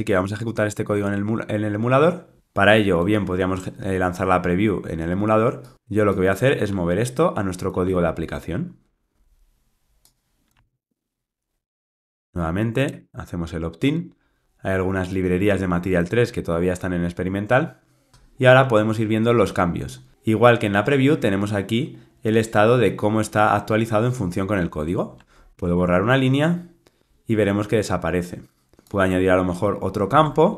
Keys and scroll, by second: 7.8 super+c, 10.5 super+v, 12.0 alt+Return, 15.2 ctrl+r, 25.5 super+BackSpace, 30.1 super+d.